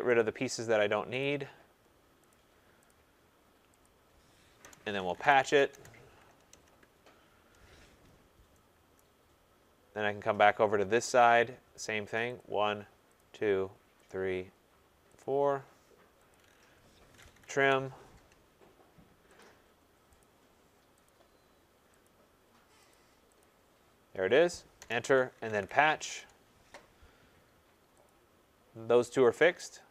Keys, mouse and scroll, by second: 0.1 click, 1.1 click, 2.2 click, 2.6-3.3 typing, 2.8 click, 3.8 click, 4.6 Return, 4.9-7.0 typing, 8.1 scroll, 8.9-10.3 typing, 9.0 right click, 9.2 middle click, 9.3-9.7 scroll, 9.7 middle click, 11.2 click, 12.3 click, 13.1 click, 14.0 click, 15.1 click, 16.3 click, 17.1-17.4 typing, 17.5 Return, 19.4 click, 20.2 click, 21.0 click, 21.0 typing, 22.0 click, 22.9 click, 23.4 click, 24.7 Return, 25.3-26.1 typing, 28.0 click, 29.0-29.9 scroll.